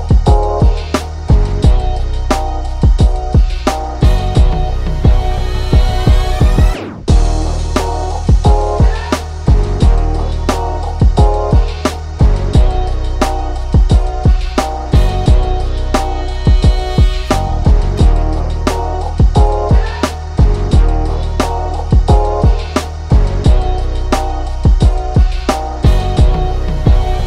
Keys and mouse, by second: 1.5 ctrl+0, 2.2 ctrl+z, 3.1 click, 4.4 click, 5.6 click, 6.5 ctrl+z, 6.7 ctrl+=, 7.4-9.0 drag, 9.0 ctrl+z, 9.5 click, 12.4 ctrl+0, 14.0 click, 15.2 click, 16.1 click, 18.2-26.1 drag, 26.1 right click, 26.7 click.